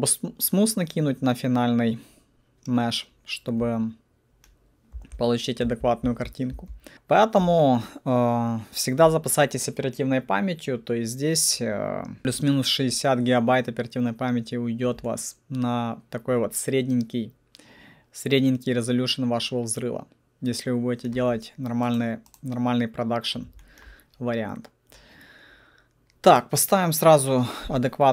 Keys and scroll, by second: 4.9 F4, 5.6 F4, 6.5 F4.